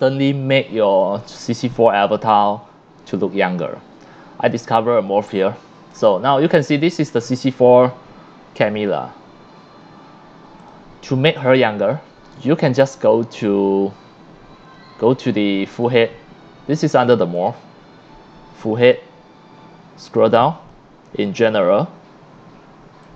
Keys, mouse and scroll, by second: 0.0 scroll up 1, 0.8 c, 1.0-5.1 drag, 5.8 click, 6.1 scroll down 1, 6.3 c, 6.5-8.4 drag, 9.0 scroll up 1, 10.6 click, 11.1 c, 11.3-11.9 drag, 13.2-15.0 drag, 15.8 click, 16.1-17.8 drag, 18.1-18.5 drag, 18.8 click, 19.2-19.6 drag, 20.0-22.8 drag, 23.0-23.1 drag.